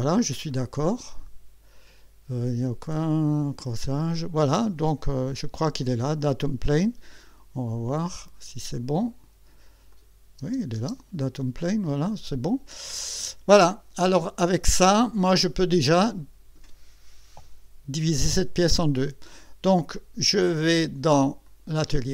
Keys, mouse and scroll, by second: 0.5 click, 3.4 click, 5.1 scroll down 1, 7.1 click, 8.7 click, 9.9 click, 10.4 space, 11.4-13.5 drag, 14.6 scroll up 1, 15.0 scroll down 1, 15.7 right click, 21.4 click.